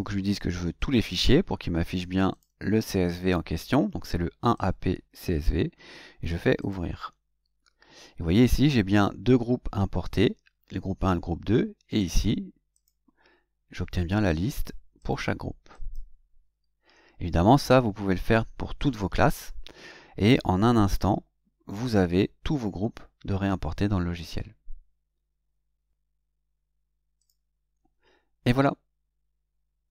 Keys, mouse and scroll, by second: 0.8 click, 2.3 click, 4.5 click, 6.6 click, 11.9 click, 12.7 click, 15.0 click, 15.7 click, 27.2 click.